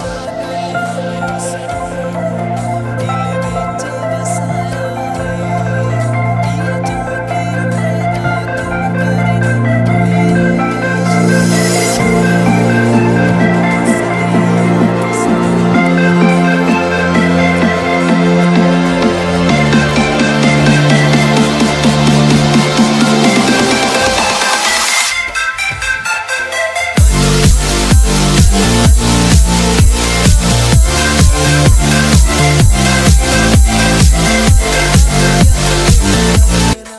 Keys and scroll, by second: 2.6 c, 3.2 Escape, 7.8 Escape, 9.1 c, 9.5 Escape, 16.0 alt+c, 16.5 p, 18.5 ctrl+z, 19.1 Escape, 22.1 ctrl+z, 23.3 alt+w, 23.9 p, 24.9 Escape, 26.3 alt+c, 26.4 alt+w, 26.7 p, 27.9 ctrl+z, 28.5 Escape, 30.3 alt+c, 30.3 alt+w, 30.8 p, 32.8 shift+F2.